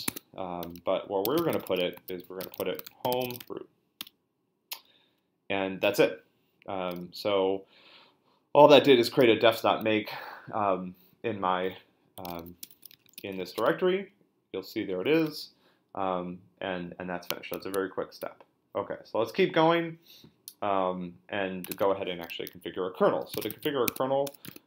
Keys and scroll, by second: 0.0-3.9 typing, 4.0 Return, 11.9-13.9 typing, 17.6 super+Tab, 21.7 Tab, 23.1-24.6 typing.